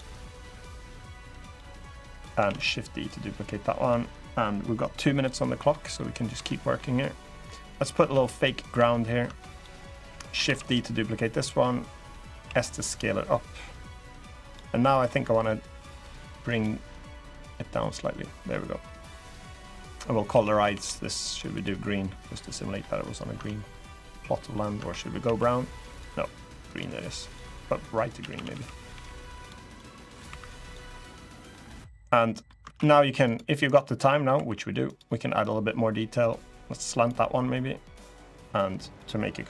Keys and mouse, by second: 0.9 click, 1.7 click, 2.2 shift+d, 2.8 click, 4.9 click, 5.4 middle click, 6.1 Tab, 6.5 drag, 6.9 drag, 7.5 drag, 7.8 Tab, 8.0 click, 8.4 Tab, 9.0 Tab, 9.3 click, 9.9 middle click, 10.2 shift+d, 10.4 right click, 10.9 middle click, 12.2 s, 14.2 click, 14.8 middle click, 15.6 click, 16.3 click, 17.3-18.6 middle drag, 20.0 a, 20.5 g, 21.0 click, 21.8 middle click, 22.5 middle click, 23.1 Tab, 24.1 middle click, 24.5 Tab, 25.0 a, 27.0 click, 27.9 a, 28.1 a, 28.2 b, 28.7 g, 29.2 click, 29.7 middle click, 30.0 3, 30.3 click, 30.6 middle click, 31.2 middle click, 31.9 click, 32.4 ctrl+r, 33.7 click, 34.1 2, 34.7 click, 35.1-36.8 drag, 38.5 click.